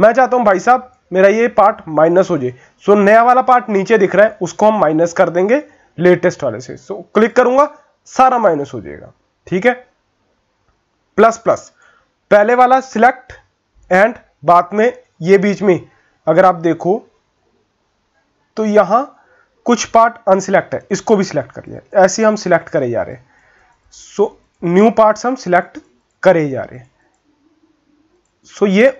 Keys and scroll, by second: 16.6 ctrl++, 17.1 ctrl++, 17.4 ctrl++.